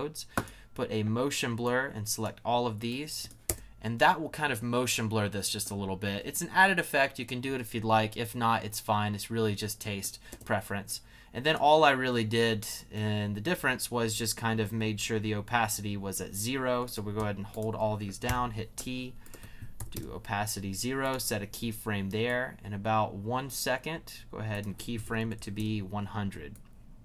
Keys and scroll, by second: 3.4 space, 10.3 space, 18.2 shift+t, 18.8 t, 19.8 0, 19.9 Return, 24.8-25.7 typing.